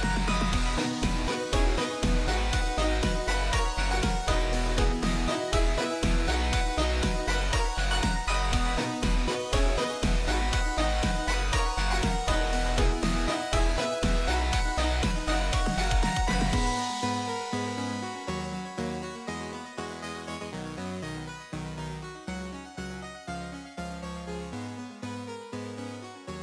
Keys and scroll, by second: 2.4-3.5 typing, 7.2-8.1 typing, 8.8 Up, 9.8 Return, 12.8-13.8 typing, 19.0 ctrl+w, 23.2 ctrl+w.